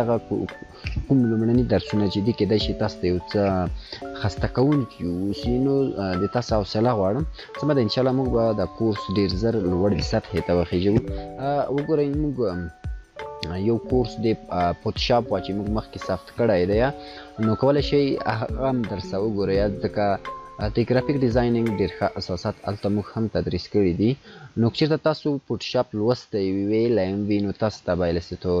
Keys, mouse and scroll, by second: 0.0-1.0 click.